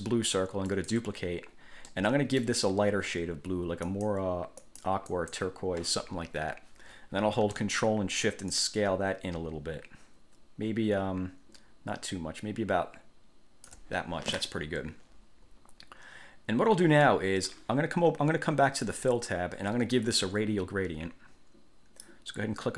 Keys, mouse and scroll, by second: 0.9 click, 2.1 middle click, 4.1 click, 4.8 click, 5.3 click, 8.7 ctrl+shift+click, 19.0 click.